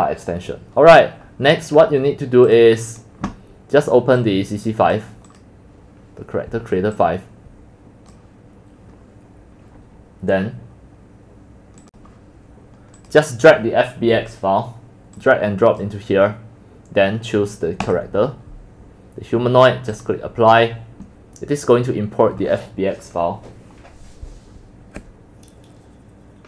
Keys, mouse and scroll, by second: 2.5 click, 4.2 click, 5.5 click, 7.0-10.7 drag, 12.3 click, 13.0 click, 15.2 click, 17.9 click, 19.9-25.2 drag, 25.2-26.4 drag.